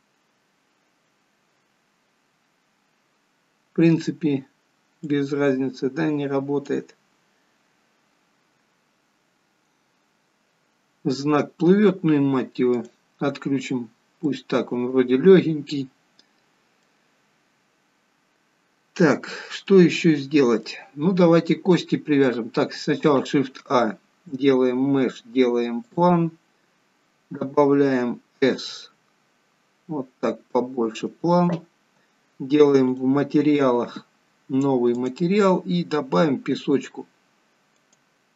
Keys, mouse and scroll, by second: 5.2 click, 12.8 click, 14.1 scroll down 4, 14.2 middle click, 19.2 scroll up 3, 19.7 middle click, 20.9-21.8 scroll down 2, 21.8 middle click, 23.4 shift+a, 26.6-28.6 scroll down 5, 28.6 s, 33.1 click, 35.0 click.